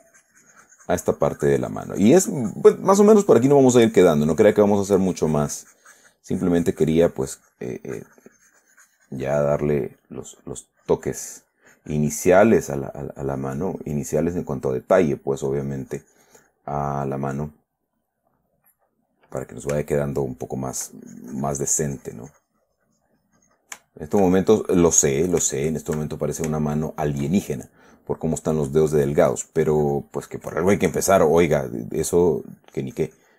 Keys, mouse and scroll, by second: 13.1 middle click, 13.7-15.4 drag, 14.6 middle click, 15.9-17.1 drag, 17.1-19.2 middle drag, 19.5 middle click, 20.3 shift+middle click, 21.4 shift+click, 22.2-24.2 shift+drag, 24.2 shift+click, 24.3 shift+middle click, 24.9 shift+click, 25.5 shift+middle click, 27.0 shift+middle click, 28.8-32.0 drag, 32.0 middle click.